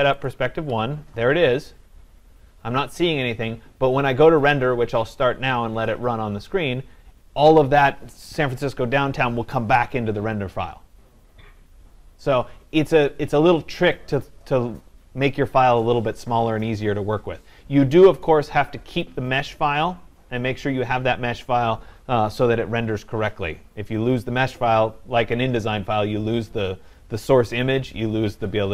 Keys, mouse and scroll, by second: 0.6 click.